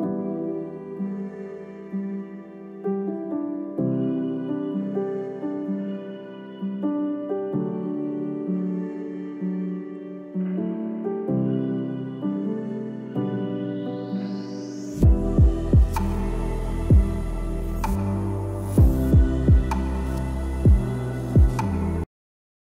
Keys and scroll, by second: 0.3 p, 0.5 l, 0.7 space, 1.8 space, 4.1 space, 5.7 space, 7.8-9.6 typing, 14.7 space.